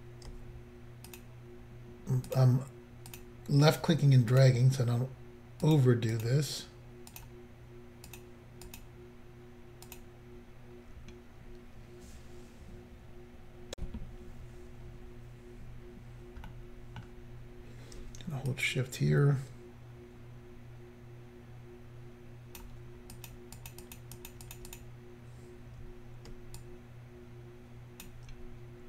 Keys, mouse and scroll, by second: 1.1 shift+click, 1.2 shift+click, 2.3 shift+click, 2.4 shift+click, 3.1 shift+click, 3.2 shift+click, 4.3 shift+click, 4.4 shift+click, 5.6 shift+click, 5.8 shift+click, 6.1 shift+click, 6.2 shift+double click, 7.1 shift+click, 7.2 shift+click, 8.1 shift+click, 8.2 shift+click, 8.7 shift+click, 8.8 shift+click, 9.9 shift+click, 10.0 shift+click, 13.7 Insert, 15.8-16.5 scroll down 1, 16.5 middle click, 18.5 shift+click, 23.2 shift+click, 23.3 shift+click, 23.6 shift+click, 23.7 shift+double click, 23.9 shift+click, 24.0 shift+click, 24.2 shift+click, 24.3 shift+double click, 24.5 shift+click, 24.6 shift+click, 24.7 shift+click, 24.8 shift+double click, 25.9 scroll down 1, 26.6 shift+click.